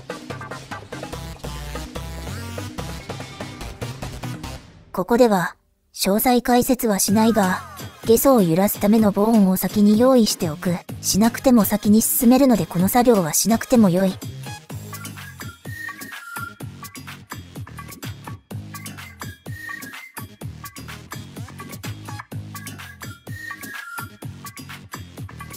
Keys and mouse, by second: 0.6 click, 5.3 e, 6.4 e, 7.6-9.8 typing, 11.7 KP_3, 13.1 click, 13.6 click, 13.9 click, 14.4 middle click, 14.6 click, 14.6 middle click, 14.9 click, 15.1 middle click, 15.6 click, 15.9 middle click, 16.2 click, 16.3 middle click, 16.5 click, 16.8 ctrl+z, 17.3 click, 19.1 click, 20.2 click, 21.5 KP_1, 23.4 click, 24.1 shift+d.